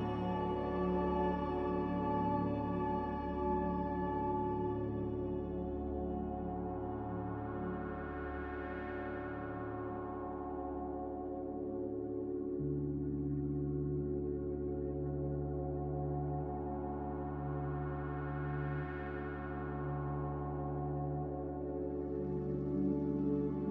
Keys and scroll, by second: 0.0-0.6 typing.